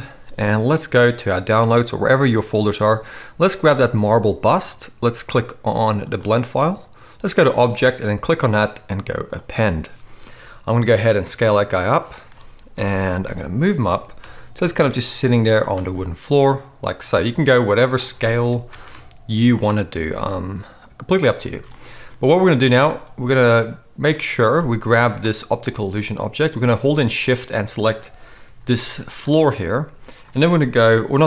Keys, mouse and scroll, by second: 3.9-12.0 drag, 3.9-13.3 right drag, 10.6 s, 12.7 KP_1, 13.3 click, 13.7-24.2 right drag, 13.9 g, 16.9 s, 18.4 g, 19.9 s, 21.5 alt+a, 24.0 click, 24.0-25.1 middle drag, 25.1-27.2 right drag, 27.2 shift+middle click, 27.3-29.1 shift+right drag, 28.4 g, 29.1-31.2 middle drag.